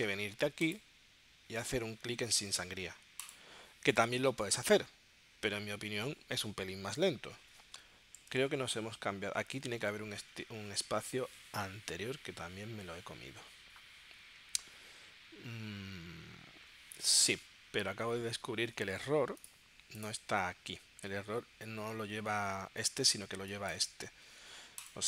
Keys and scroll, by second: 8.4 super+Tab, 24.0 space.